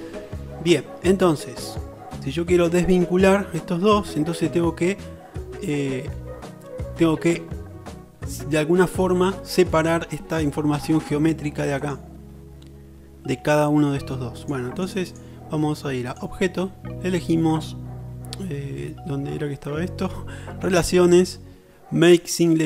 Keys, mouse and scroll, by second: 12.1 middle click, 16.3-22.6 drag.